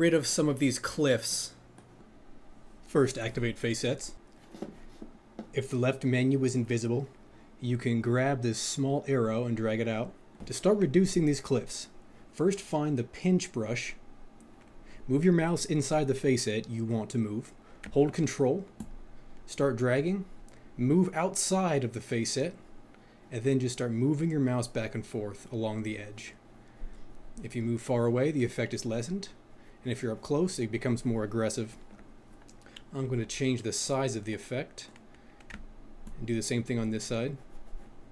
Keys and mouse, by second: 18.8 ctrl+click, 34.0 click, 36.0 ctrl+click.